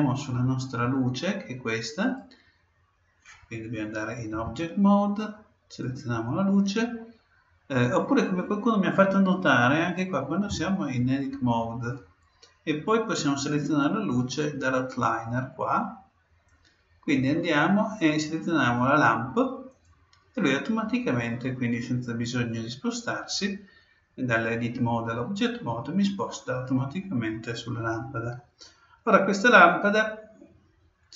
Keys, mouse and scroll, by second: 2.0-3.8 right drag, 2.1 middle click, 4.3 Tab, 5.8-7.8 right drag, 9.3-11.1 right drag, 10.5 Tab, 16.5-18.2 drag, 19.7-21.5 drag.